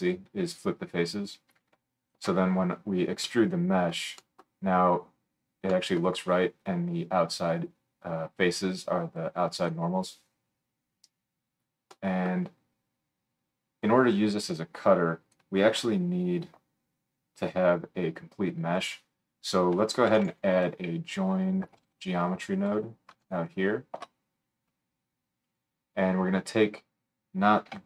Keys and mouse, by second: 2.0 alt+shift+middle click, 2.1-9.2 alt+shift+drag, 9.2-15.4 middle drag, 15.8 F3.